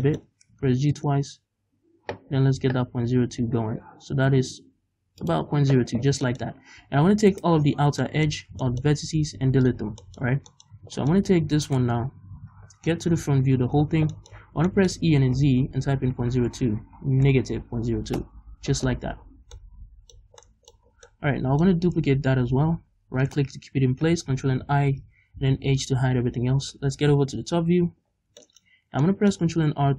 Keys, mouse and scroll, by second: 0.1 shift+middle click, 0.5 g, 5.3 shift+click, 5.5-6.0 scroll down 2, 6.2 shift+middle click, 6.5-7.3 scroll up 1, 7.3 alt+right click, 8.0 shift+middle click, 9.2 x, 10.0 shift+middle click, 10.4 scroll down 1, 10.5 middle click, 10.7 scroll up 1, 11.1 middle click, 11.7 right click, 13.1 middle click, 13.1 KP_1, 13.9-14.7 scroll up 5, 14.1 shift+middle click, 14.7 shift+middle click, 15.1 e, 18.2 Return, 19.2-19.8 scroll down 2, 19.8-20.4 scroll down 1, 20.4 scroll down 1, 20.4-22.5 middle drag, 20.9 scroll down 2, 21.7-22.5 scroll up 2, 22.5 shift+d, 23.3-24.6 right drag, 24.6 ctrl+i, 25.6 h, 27.1 KP_7, 28.1 scroll down 2, 28.4 shift+middle click, 28.7-29.0 scroll up 2, 29.0 shift+middle click, 29.8 ctrl+r.